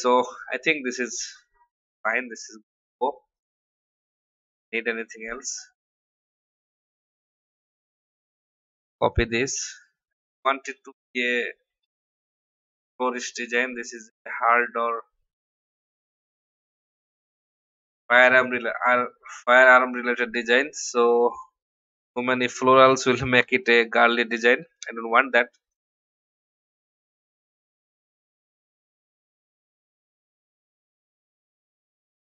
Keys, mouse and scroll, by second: 0.9-2.0 drag, 7.0 v, 8.2 ctrl+c, 8.9 click, 9.5 ctrl+v, 11.7 v, 12.2 shift+click, 13.5-16.0 drag, 16.2 i, 16.9 click, 17.3 v, 18.4 alt+shift+click, 19.9-21.3 alt+drag, 21.9 ctrl+r, 22.8 click, 23.4 shift+Right, 24.1 shift+Left, 24.9 shift+Left, 25.6 shift+click, 28.8 ctrl+g, 30.0 shift+click, 30.7-32.2 drag.